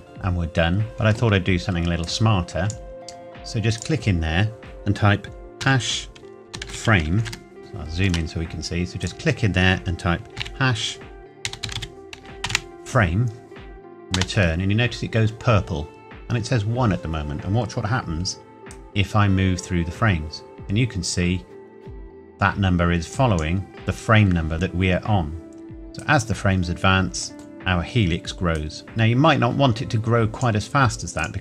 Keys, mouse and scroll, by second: 0.8 click, 6.4-7.3 typing, 7.6 shift+middle click, 9.0 click, 11.4-12.6 typing, 14.2 Return, 18.7 click, 26.0 click, 27.3 middle click, 28.6 click.